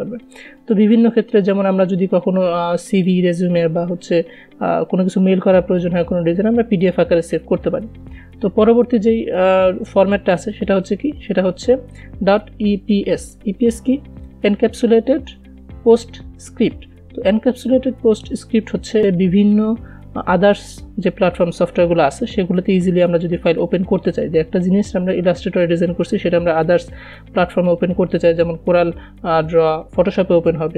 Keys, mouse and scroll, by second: 3.6 click, 10.9 click, 19.0 click.